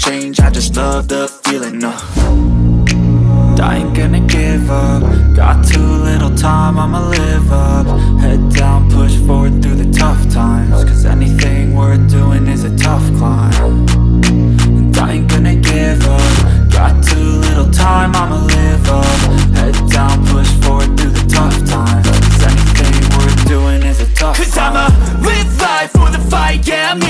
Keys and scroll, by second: 1.6 Delete, 9.8 space, 11.9 4, 12.1 5, 12.6 Return, 16.1 ctrl+z.